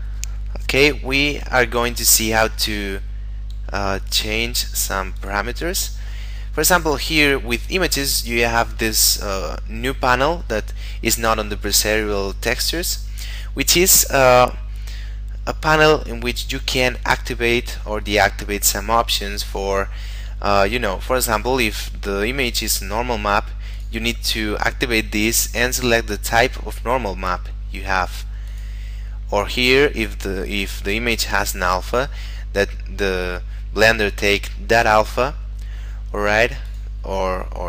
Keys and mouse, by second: 5.1 click, 5.9 middle click, 23.7 click, 28.5 click, 36.6 click.